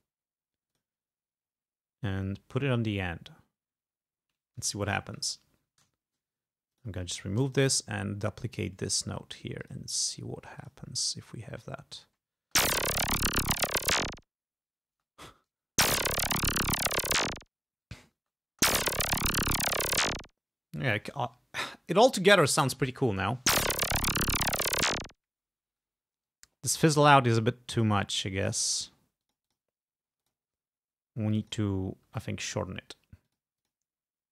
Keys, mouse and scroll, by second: 0.8 click, 1.9-2.2 scroll down 2, 2.5 scroll down 2, 2.8 scroll up 2, 3.6-4.2 scroll up 4, 5.2 ctrl+Down, 6.8 click, 7.2 shift+right click, 7.6 shift+click, 8.4 ctrl+click, 8.5 ctrl+middle click, 9.0-9.4 ctrl+scroll up 2, 9.7 middle click, 10.7 middle click, 12.5 space, 15.0 space, 15.4-15.8 scroll up 2, 15.8 space, 18.3 space, 20.9 space, 23.4 space, 25.7 space, 26.2 scroll down 2, 27.0 click, 27.8 click, 28.2 click, 28.8 click, 29.3 click, 30.3 click, 31.4 click, 33.3 click, 33.7 click.